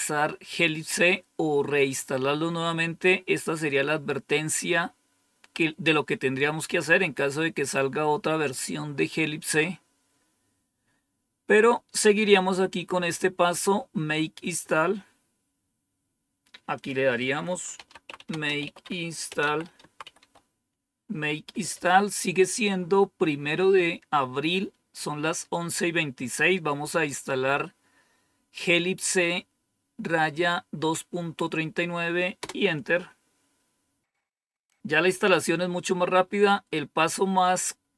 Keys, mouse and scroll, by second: 3.4-8.6 scroll down 1, 8.6-16.7 scroll down 2, 16.7 click, 17.5-20.6 typing, 32.3 Return.